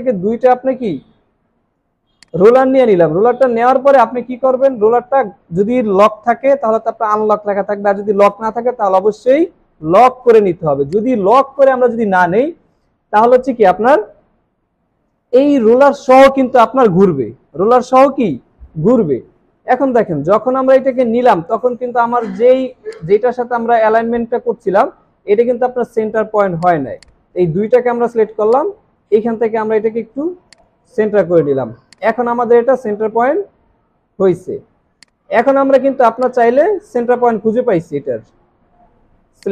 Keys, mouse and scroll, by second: 3.4 right click, 19.5-20.1 scroll up 1, 21.2 scroll down 1, 27.0 double click, 33.2 alt+scroll up 1, 34.4-34.8 alt+scroll down 1, 36.0 space, 37.8 alt+scroll up 1.